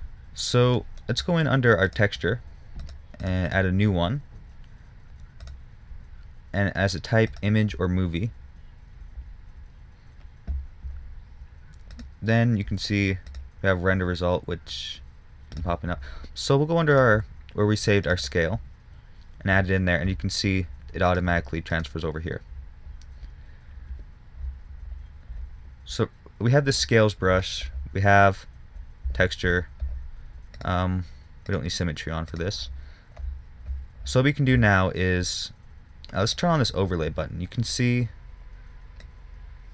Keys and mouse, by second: 20.3 middle click.